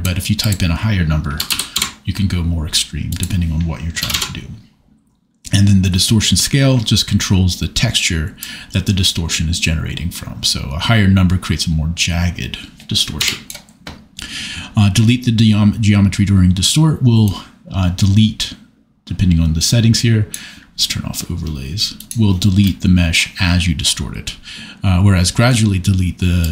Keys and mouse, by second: 0.4-1.9 drag, 3.2-4.2 drag, 8.4-13.3 drag, 17.2-20.4 drag, 22.0 click, 26.4 click.